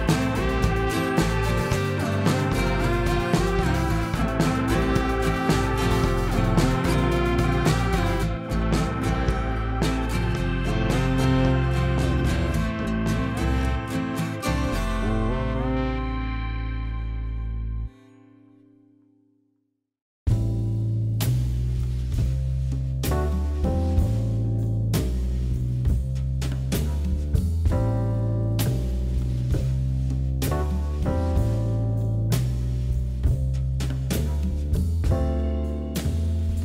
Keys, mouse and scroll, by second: 4.6 click, 5.5 g, 6.6 click, 7.2 shift+click, 8.0 g, 9.1 click, 9.6 shift+click, 10.3 g, 11.3 click, 11.6 scroll down 1, 12.1-13.6 middle drag, 13.9 scroll down 1, 14.0-15.0 middle drag, 15.0-15.7 scroll down 1, 15.7-16.4 middle drag, 16.4 alt+x, 17.1 click, 17.8 ctrl+z, 18.1-18.5 middle drag, 18.5-18.8 scroll down 1, 18.8 middle drag, 18.9 drag, 19.0-19.6 scroll up 3, 19.6 click, 20.8 click, 21.1 middle click, 21.7 ctrl+KP_3, 22.0 scroll up 3, 22.7 click, 24.4 shift+drag, 25.4-26.0 scroll down 1, 26.4 KP_3, 27.0 KP_7, 27.4 scroll down 2, 27.7 shift+middle click, 28.5 shift+z, 29.5 shift+d, 33.3 KP_3, 34.8 shift+z, 35.2 scroll up 2, 35.4 click, 36.0 middle click, 36.3 scroll down 2, 36.5-36.6 middle drag.